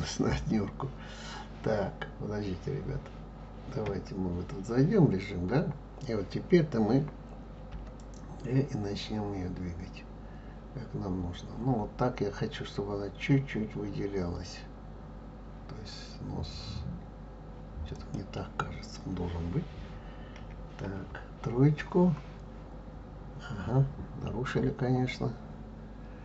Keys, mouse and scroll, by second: 3.9 KP_1, 7.7 g, 20.3 KP_1, 21.0 KP_3, 22.7-24.9 scroll up 1, 25.6-26.2 scroll up 1.